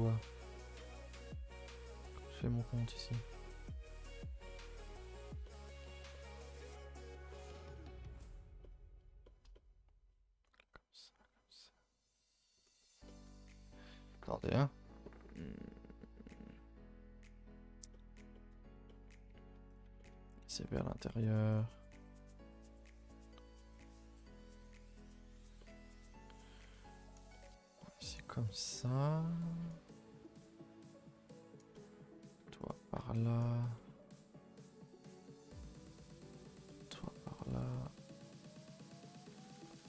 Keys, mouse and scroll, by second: 4.4-5.9 middle drag, 5.9 a, 6.0 a, 6.1-12.5 middle drag, 12.6-13.0 scroll up 2, 13.0 shift+middle click, 13.3 scroll up 1, 13.5-16.1 scroll down 1, 17.9 middle click, 18.5-18.9 scroll up 2, 18.9 middle click, 19.7 alt+click, 20.0-21.6 middle drag, 21.6 shift+click, 22.0 shift+click, 23.3 shift+click, 23.8 shift+click, 25.2 shift+click, 25.6-32.7 middle drag, 32.7 alt+shift+click, 33.1 middle click, 34.0-34.9 scroll up 2, 34.9 alt+shift+click, 35.3-38.2 shift+middle drag, 38.2 ctrl+z, 39.1 alt+shift+click, 39.4 middle click.